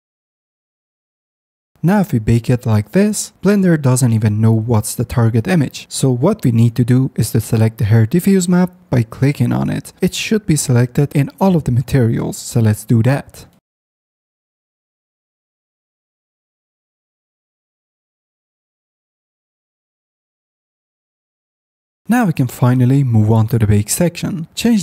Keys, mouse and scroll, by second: 0.6 middle click, 0.8 middle click, 1.5 middle click, 1.8 middle click, 2.0 middle click, 4.0 ctrl+v, 7.1-8.5 middle drag, 8.5 click, 8.6 middle click, 9.5 click, 9.5 middle click, 10.2 click, 10.3 middle click, 10.5 click, 10.6-11.3 middle drag, 11.3 click, 14.5 click, 16.4 click, 17.2 click, 18.3 click, 19.1 click, 20.2 click.